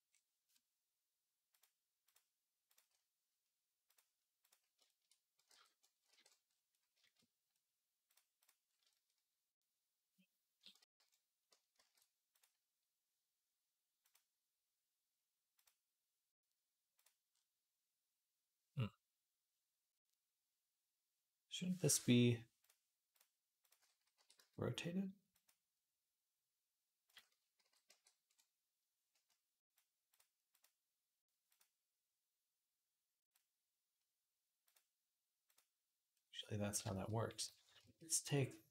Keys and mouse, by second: 1.3 click, 2.0-3.7 middle drag, 3.7 click, 3.8-5.2 middle drag, 5.2 alt+click, 5.3 alt+g, 5.6 middle click, 5.8 alt+click, 5.9 alt+r, 6.1 middle click, 6.8 shift+click, 7.0-8.7 middle drag, 8.7 shift+click, 8.8-14.7 middle drag, 10.7 alt+r, 11.6 ctrl+z, 13.9 click, 15.5 click, 22.5 click, 22.9 click, 23.4 click, 24.0 r, 26.9 click, 27.4 alt+g, 27.7 alt+r, 28.1-29.5 alt+middle drag, 29.5 click, 29.6 middle click, 29.9 click, 30.0 middle click, 30.5-31.5 drag, 31.5-33.1 middle drag, 33.1 click, 33.2-38.7 middle drag.